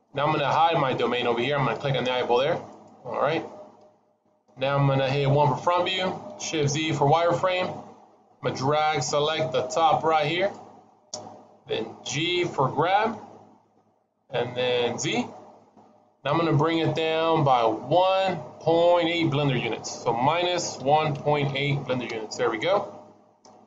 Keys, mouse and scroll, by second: 2.6 click, 5.3 KP_1, 6.5 shift+z, 8.6 click, 12.6 g, 22.9-23.3 scroll up 1, 23.3 middle click.